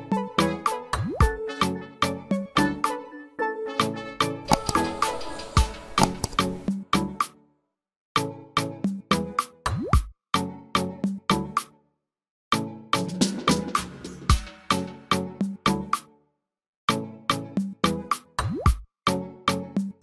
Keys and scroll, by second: 13.9 ctrl+x, 17.8 ctrl+f.